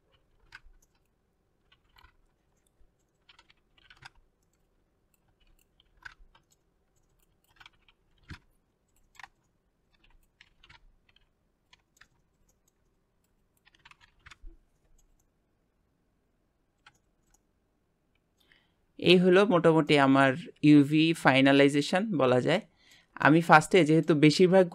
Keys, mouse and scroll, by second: 1.0 shift+middle drag, 1.3 click, 2.8-3.8 shift+middle drag, 4.6 r, 4.8 Tab, 5.1 middle click, 5.4 click, 7.4-8.3 shift+middle drag, 8.6 shift+click, 10.0 middle click, 10.3 click, 10.4 middle click, 10.5 Tab, 10.7 shift+middle click, 11.4 click, 12.3 Tab, 12.7 Tab, 13.5 Tab, 13.6 middle click, 14.2 click, 14.4 middle click, 15.0 scroll, 16.9-17.3 middle drag, 17.3 click, 17.4-18.4 middle drag, 18.8-19.6 middle drag, 19.7-20.9 shift+middle drag, 22.6-24.7 middle drag.